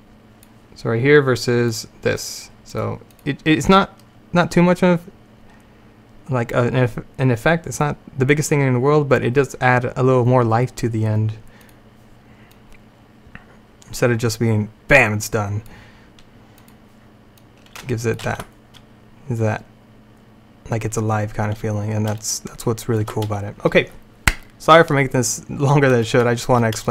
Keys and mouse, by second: 1.8-14.3 drag, 16.7-19.2 drag, 18.3 alt+a, 22.3 middle click, 22.6 middle click.